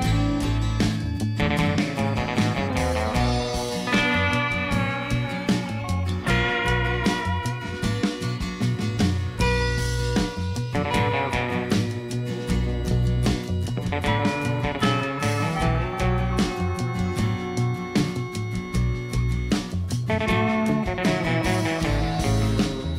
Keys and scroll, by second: 1.9 g, 2.3 x, 5.0 -, 5.1 1, 5.2 Return, 8.3 g, 8.6 x, 11.2 alt+a, 15.0 shift+d, 15.2 y, 16.8 alt+a, 18.0 Tab, 21.3 g, 21.4 x.